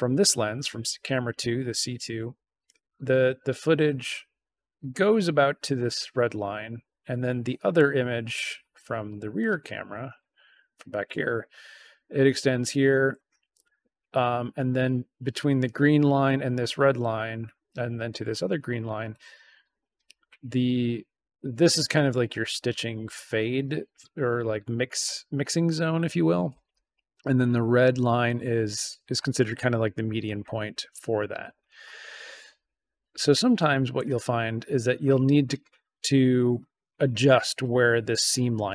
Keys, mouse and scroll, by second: 8.9 middle click, 9.7 right click, 33.5 middle click, 34.2 right click, 35.2 right click.